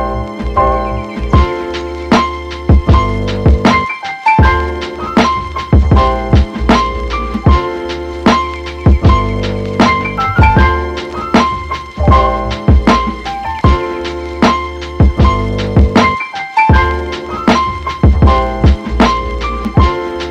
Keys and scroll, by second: 11.1 super+z, 18.3 space, 19.8 super+z.